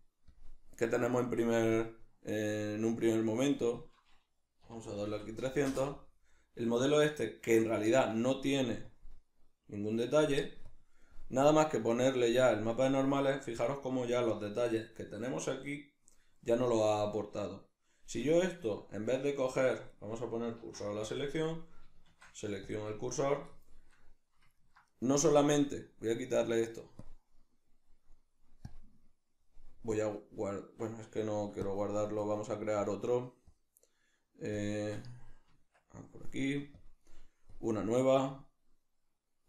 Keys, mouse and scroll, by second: 0.3 click, 2.8 middle click, 3.8-7.0 drag, 5.1 0, 7.0 right click, 8.9 click, 10.7 click, 11.5 click, 18.5 right click, 19.3-19.9 shift+middle drag, 19.9 right click, 20.6 shift+s, 21.4 right click, 22.1 shift+s, 23.5-25.8 shift+middle drag, 25.8 click, 26.4-27.0 middle drag, 27.0 click, 28.7 click, 30.0-31.7 drag, 31.0 Escape, 33.5 click, 34.6 click, 35.5 Tab, 36.8 click, 37.5-39.4 drag.